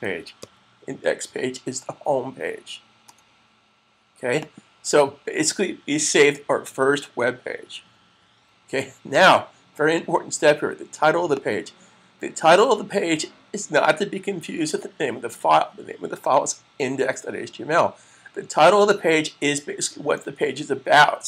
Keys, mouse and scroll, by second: 0.0-0.7 typing, 4.2 click, 11.2 click.